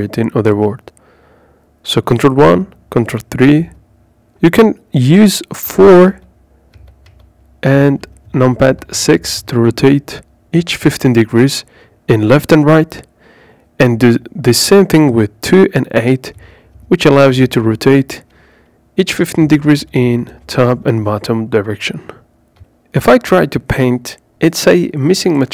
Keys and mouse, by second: 1.8 ctrl+KP_3, 4.1 KP_4, 5.1-10.2 typing, 13.2 KP_2, 13.4 KP_2, 13.6 KP_2, 14.8-15.7 typing.